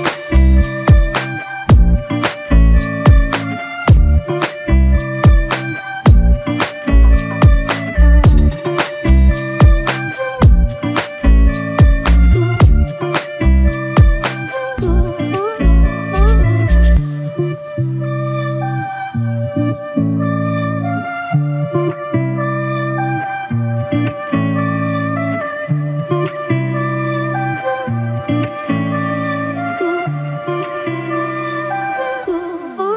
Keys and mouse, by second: 0.0-0.1 typing, 9.0 double click, 11.7 double click, 15.3 double click, 20.6 double click.